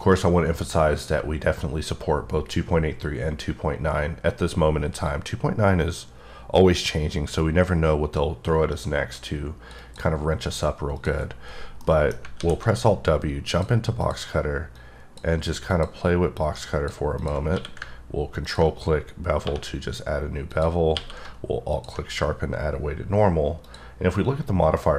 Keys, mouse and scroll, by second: 5.1 click, 9.8 double click, 11.0 click, 11.5-11.8 scroll up 3, 11.8 middle click, 12.4 alt+w, 13.4-13.8 drag, 15.1 click, 16.4 click, 17.2 click, 17.6 q, 18.5 ctrl+click, 19.5 1, 20.5 click, 21.0 q, 21.7 alt+click.